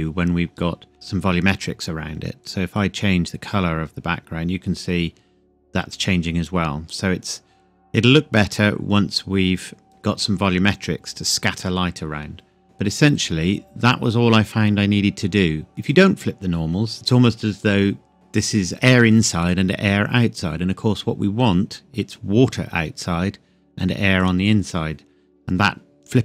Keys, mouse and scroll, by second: 2.4 click, 3.8 click, 13.1 click, 15.8 click, 24.2 click.